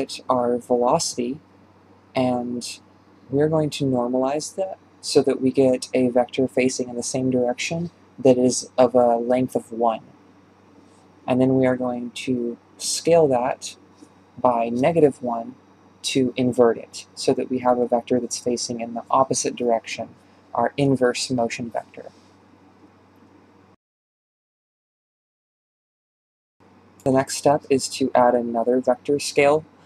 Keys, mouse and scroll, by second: 0.0-6.4 drag, 6.5-7.7 drag, 11.5 click, 13.9-16.5 drag, 17.1 ctrl+j, 23.3 BackSpace, 23.8-26.8 drag.